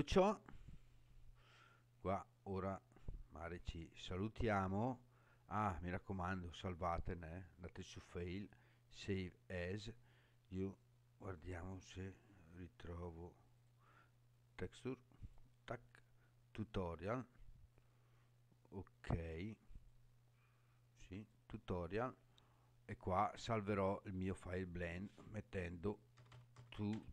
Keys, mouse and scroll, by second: 0.1 scroll down 2, 0.7-2.6 scroll down 2, 3.3-3.7 scroll up 4, 4.3 scroll up 3, 7.2-9.1 drag.